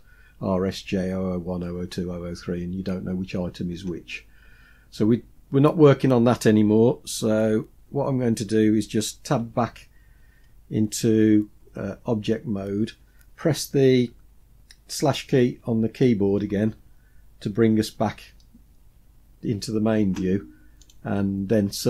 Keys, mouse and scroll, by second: 4.5-7.6 scroll down 1, 9.5 Tab, 16.6 KP_Divide, 20.8 click.